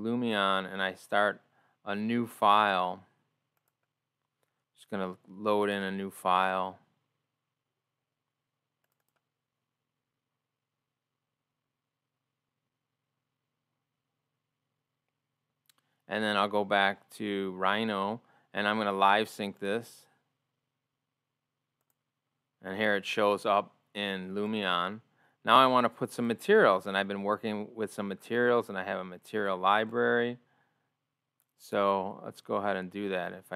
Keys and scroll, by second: 13.7 ctrl+o, 21.9 ctrl+o, 27.8 ctrl+o, 33.4 ctrl+o.